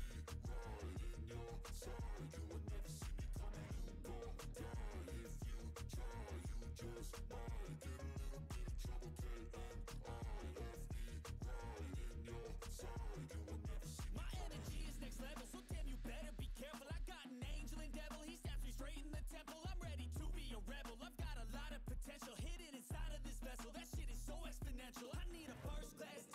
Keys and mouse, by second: 0.0 click, 0.8 click, 13.6 click, 14.7-15.9 middle drag, 21.0-25.3 drag, 25.3 right click, 25.6-26.3 drag.